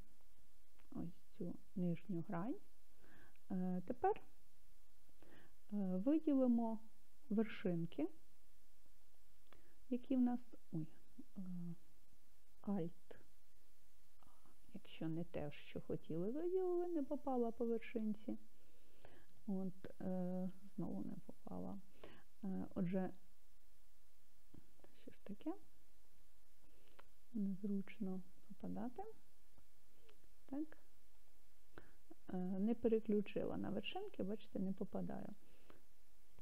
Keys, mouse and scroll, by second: 1.0-5.3 middle drag, 7.6 scroll up 2, 9.1 click, 14.2 alt+a, 16.3 scroll up 1, 19.3 click, 21.4 alt+a, 23.0 click, 24.1 alt+a, 25.9 scroll down 1, 26.0-27.7 middle drag, 30.0 click, 31.2 click, 33.4 click, 36.0 alt+a.